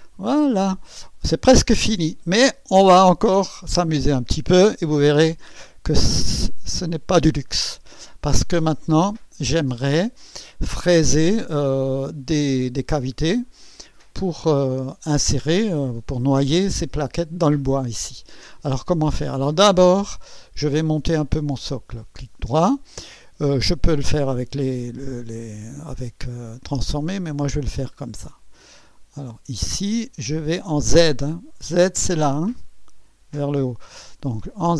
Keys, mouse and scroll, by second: 0.6 click, 1.9 scroll up 1, 7.2 right click, 8.0 click, 8.6-10.7 drag, 21.2 click, 25.9 right click, 27.1 click, 28.1 click, 29.1 click.